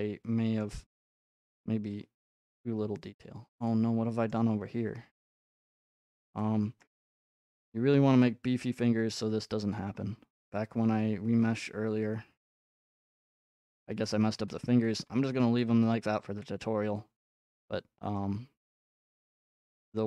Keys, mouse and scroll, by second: 0.6 middle click, 4.3 middle click, 6.8 middle click, 7.0 middle click, 9.2 ctrl+middle click, 9.7 middle click, 10.3 middle click, 10.9 ctrl+z, 11.1 ctrl+z, 14.0 shift+z, 17.6 scroll, 18.9 scroll, 19.3 ctrl+Tab, 19.8 scroll.